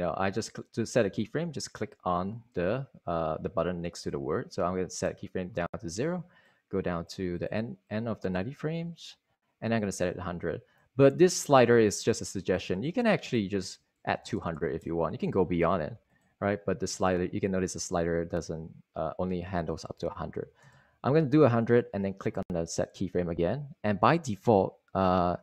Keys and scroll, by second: 14.2 super+a, 14.5-15.7 typing, 20.4 super+a, 20.6-21.6 typing.